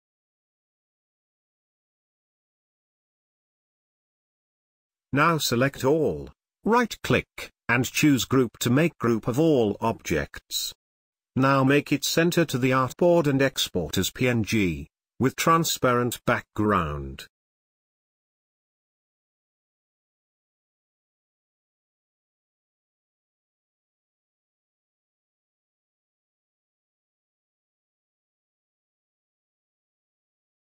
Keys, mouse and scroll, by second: 1.9 click, 3.2 space, 3.6-5.6 ctrl+drag, 5.6 click, 7.3 right click, 8.4 click, 11.2 click, 24.0-25.7 typing, 29.6 click.